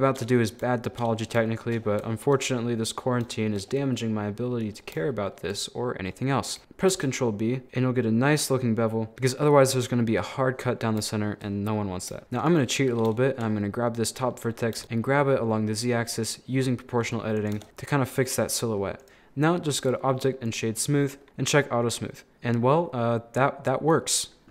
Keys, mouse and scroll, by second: 1.8-2.6 scroll up 3, 2.2 shift+middle click, 2.6 middle click, 3.1 scroll down 3, 3.3 shift+middle click, 3.7-5.1 scroll up 2, 5.1 scroll up 1, 5.2-6.6 shift+middle drag, 6.9 ctrl+b, 9.1 middle click, 9.8-10.8 scroll up 1, 10.8 scroll down 2, 11.0-12.2 shift+middle drag, 12.2 1, 12.4 right click, 13.0 scroll up 2, 13.2 shift+middle click, 13.6 scroll up 1, 13.6-14.8 middle drag, 14.8 g, 17.6 Tab, 17.7 middle click, 18.5 scroll down 3, 18.6 middle click, 19.0 right click, 19.8-21.2 drag, 21.2 middle click, 21.9 scroll down 1, 22.0-24.5 middle drag.